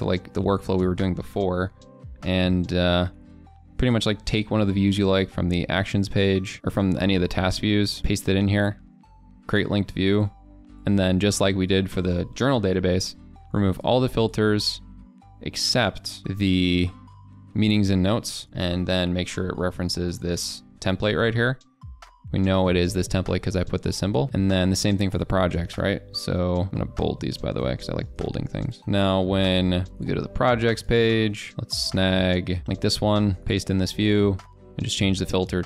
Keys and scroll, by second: 8.0 ctrl+v, 26.7 ctrl+a, 26.7 ctrl+v, 27.4 ctrl+z, 28.2 ctrl+b, 28.8 ctrl+b, 28.8 ctrl+a, 33.7 ctrl+v.